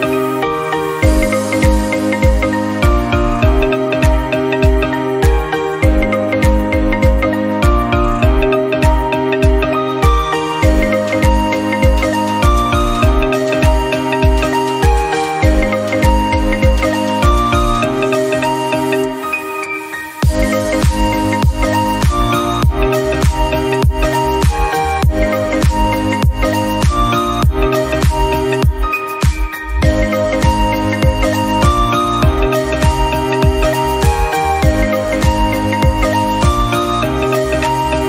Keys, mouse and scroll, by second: 0.5 click, 1.0 ctrl+z, 1.8 click, 2.5 middle click, 3.3 click, 3.8 middle click, 7.0 ctrl+z, 7.3 middle click, 7.7 click, 8.2 i, 9.0 scroll up 1, 9.3 middle click, 9.5 1, 9.6 click, 10.1 middle click, 10.3 scroll up 1, 10.5 click, 11.6-12.3 scroll down 1, 12.3 ctrl+z, 12.4 ctrl+z, 12.5 ctrl+z, 12.9 ctrl+z, 13.2 i, 13.8 scroll up 1, 13.9 1, 14.2 click, 14.5 scroll down 1, 14.8 shift+middle click, 15.7 click, 16.2 3, 16.4 click, 16.7 i, 17.3 middle click, 17.8 1, 18.1 click, 18.5 scroll down 1, 18.6 Tab, 18.8 middle click, 19.1-19.5 scroll up 2, 19.5 click, 19.6 middle click, 20.9 shift+middle click, 21.5 click, 21.7 middle click, 21.8 scroll up 1, 22.1 Tab, 23.0 3, 23.1 click, 23.4 scroll up 1, 23.6 i, 24.3 scroll up 1, 24.5 shift+middle click, 24.7 1, 24.8 click, 25.4 scroll down 3, 25.5-26.6 middle drag, 26.6 Tab, 26.7 scroll down 1, 27.0 shift+middle click, 27.2-27.7 scroll up 1, 27.7 click, 28.0 shift+middle click, 28.3 click, 28.5 middle click, 28.7 Tab, 28.8-29.6 scroll up 1, 29.6 3, 29.7 middle click, 30.1 click, 30.5 i, 31.5 click, 31.8 Tab, 31.9 scroll down 2, 32.1 middle click, 32.3 scroll up 2, 32.4 middle click, 32.8 click, 33.0 Tab, 33.7 i, 34.6 click, 34.9 Tab, 35.0 scroll down 2, 35.1 middle click, 35.5 scroll up 2, 35.8 shift+middle click, 36.0 Tab, 36.1-36.4 scroll up 1, 36.4 click, 37.0 i, 37.7 click.